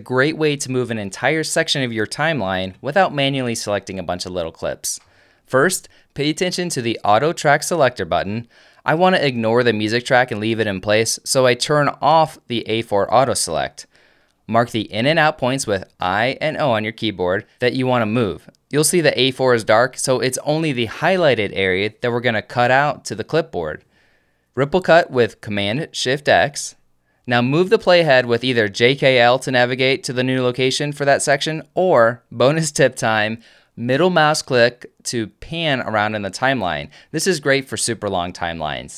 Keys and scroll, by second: 16.3 i, 18.9 o, 22.7 alt+super+F4, 26.6 shift+super+x, 29.9 j, 31.7 k.